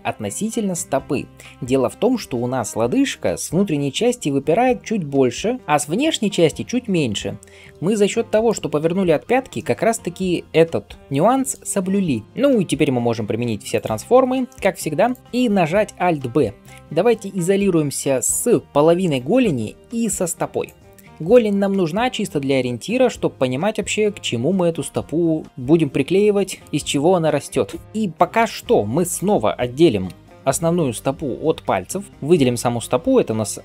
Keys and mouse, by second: 12.2 ctrl+a, 12.8 ctrl+a, 15.0 click, 15.2 ctrl+alt+s, 15.8 alt+b, 21.1-29.0 shift+middle drag, 28.3 Tab, 29.0 click, 30.0-33.6 middle drag, 30.0 l.